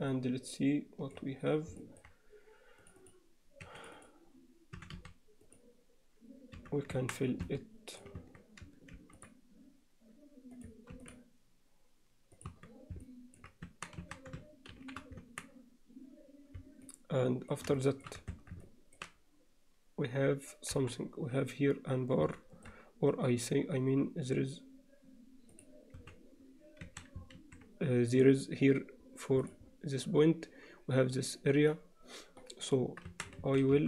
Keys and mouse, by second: 0.1-1.2 alt+middle drag, 1.8 alt+middle click, 2.9 click, 3.6 2, 4.0 click, 4.8 e, 6.6 f, 7.4 Tab, 7.5-8.0 alt+middle drag, 8.2 Tab, 9.0 ctrl+r, 12.5 Tab, 13.0 middle click, 13.7 Tab, 14.0 a, 14.8 shift+n, 15.2 Tab, 16.9 alt+middle click, 17.8 alt+shift+middle drag, 18.6 alt+Tab, 18.6 middle click, 20.8 KP_7, 22.4 alt+shift+middle click, 25.6 click, 26.0 z, 26.9 a, 27.4 alt+a.